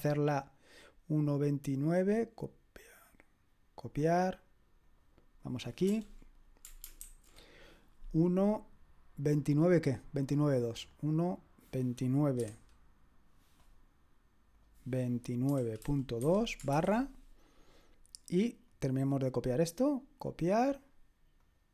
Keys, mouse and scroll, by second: 5.9 BackSpace, 7.0 ctrl+alt+v, 9.2-12.4 drag, 12.4 9, 14.5 click, 15.2-16.7 typing, 18.7-21.7 drag, 20.3 middle click, 20.3 right click.